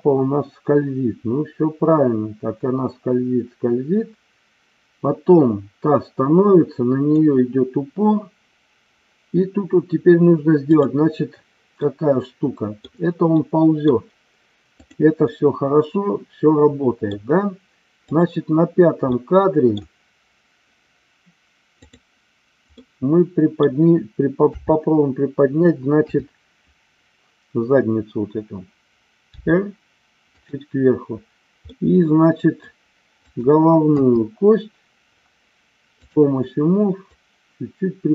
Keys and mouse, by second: 10.8 click, 11.8-12.9 middle drag, 13.3 middle click, 14.6 click, 15.3-17.0 middle drag, 19.0 middle click, 21.7 click, 22.7 middle click, 24.4 KP_5, 25.9 KP_3, 29.4 r, 31.7 middle click, 33.2 click, 33.9 KP_3, 37.0-38.1 drag.